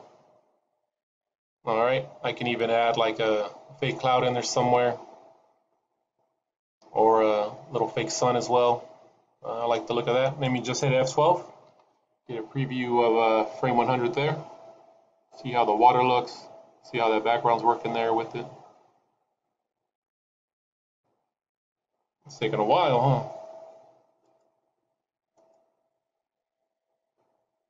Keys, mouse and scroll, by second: 0.2 scroll up 1.